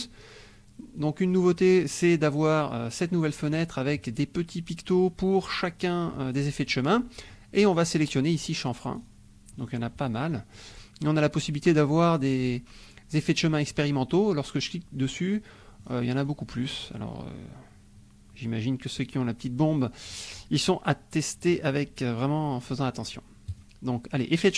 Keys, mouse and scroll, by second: 1.0 click, 3.7 click, 7.2 scroll up 1, 7.6-8.7 scroll down 1, 8.7-9.9 scroll down 4, 10.0-10.5 scroll up 2, 13.7 click, 15.5 scroll up 1, 15.8-17.5 scroll down 3, 17.5 scroll down 1, 19.7-20.1 scroll up 2, 21.6 scroll up 2, 22.7 scroll up 2, 23.4 click.